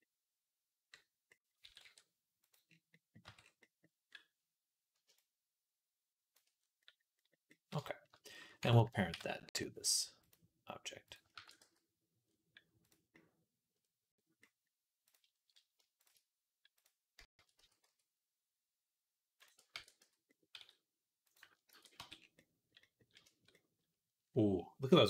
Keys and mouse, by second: 1.4 s, 3.1 Tab, 3.1-4.9 middle drag, 5.0-8.2 shift+drag, 7.2 middle click, 7.2 right click, 8.9 ctrl+p, 10.9 click, 11.2 ctrl+a, 11.9-15.9 middle drag, 15.9-21.3 drag, 17.4 s, 19.5 ctrl+a, 20.4 s, 21.6 ctrl+a, 22.0-25.0 middle drag.